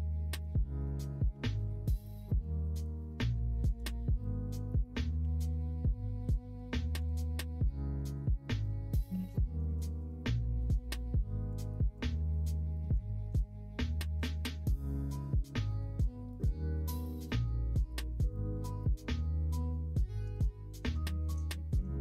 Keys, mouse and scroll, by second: 1.2 g, 2.1 middle click, 2.9 middle click, 3.6 click, 5.2 g, 7.2 click, 8.5 click, 9.1 ctrl+z, 9.5 middle click, 10.1 middle click, 11.4 click, 11.9 click, 12.3 middle click, 12.7 middle click, 14.6 middle click, 15.6-17.0 drag, 17.4 middle click, 17.9 middle click, 18.9 middle click, 19.2 middle click, 19.9 shift+click, 20.5 click, 21.0 shift+click, 21.5 click, 21.9 shift+click.